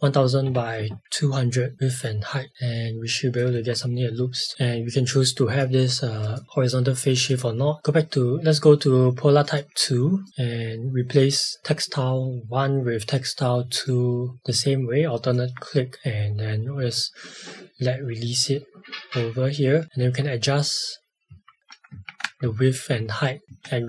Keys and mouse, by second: 1.7 click, 3.6 space, 4.5 click, 19.9 shift+Up, 21.3 shift+Down, 21.6 shift+Up, 21.9 Tab, 22.4 shift+Up, 23.4 space.